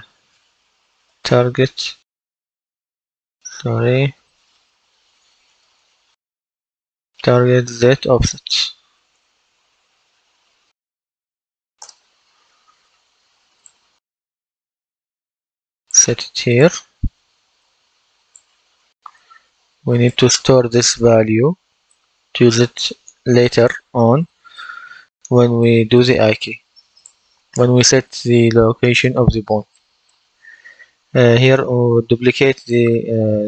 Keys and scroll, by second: 0.0-1.6 typing, 3.2 Left, 4.4 a, 5.4 Right, 7.5 shift+z, 8.6-11.3 typing, 11.7 Return.